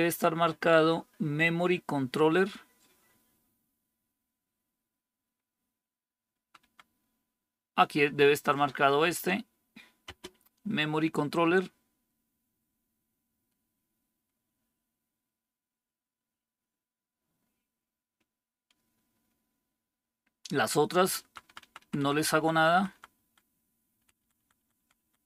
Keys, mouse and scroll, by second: 6.3 Down, 6.5 Down, 9.9 space, 21.1 Down, 21.3 Down, 21.5 Down, 21.7 Down, 21.9 Down, 22.1 Down, 22.3 Down, 22.4 Down, 22.6 Down, 22.8 Down, 23.0 Down, 23.9 Down, 24.1 Down, 24.5 Down.